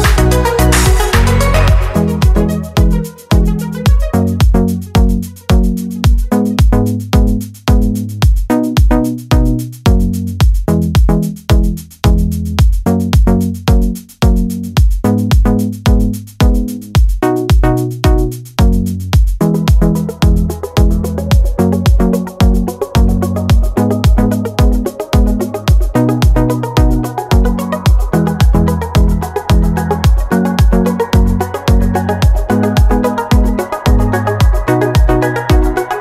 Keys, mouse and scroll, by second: 2.6 click, 5.1 click, 7.5 click, 8.4-9.7 drag, 11.7 click, 12.7 click, 13.7 middle click, 14.2 middle click, 15.9 click, 17.1 click, 18.6 click, 20.2 click, 22.1 click, 23.1 click, 24.2 click, 26.9 click, 27.8 click, 29.6 click, 30.9 click, 32.1 click, 32.7 click, 33.1 click, 33.6 click, 34.3-35.5 drag.